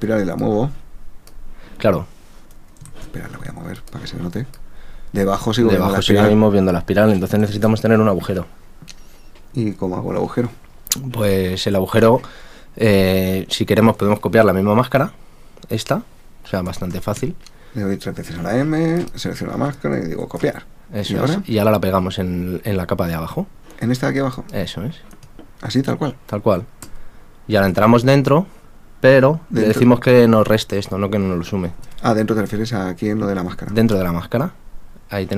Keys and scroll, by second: 2.9 super+z, 7.4 super+z, 20.0 super+c, 26.8 super+v.